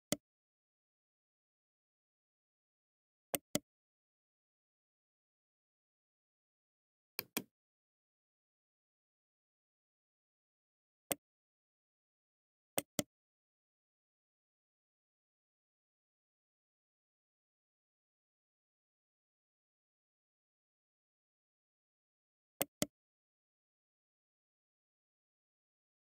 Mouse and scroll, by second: 7.0 click, 10.9 right click, 12.6 right click.